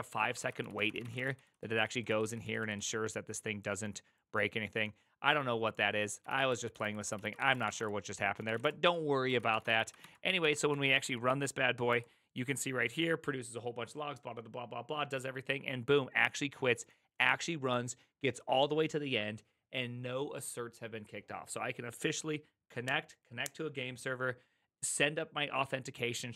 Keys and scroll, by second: 0.3-2.9 typing, 6.2-9.5 typing, 8.6 Return, 9.3 ctrl+a, 9.6 ctrl+c, 9.7 ctrl+c, 10.0 Up, 10.4 Up, 10.7 Up, 11.0 Up, 11.9 Return.